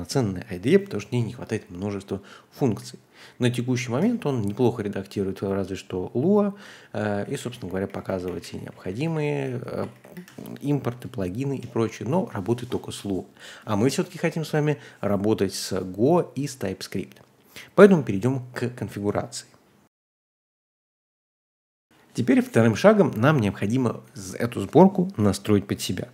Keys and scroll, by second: 1.8-4.0 typing, 6.6-9.5 typing, 9.7 ctrl+d, 9.9 ctrl+d, 10.1 ctrl+d, 11.5-11.9 typing.